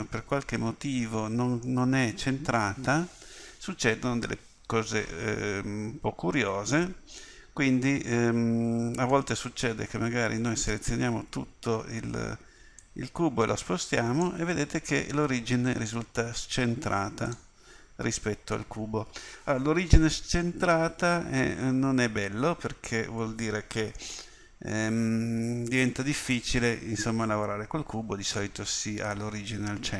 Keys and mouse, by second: 9.1 Tab, 11.0 a, 11.2 a, 15.4-19.1 middle drag, 20.2 middle click.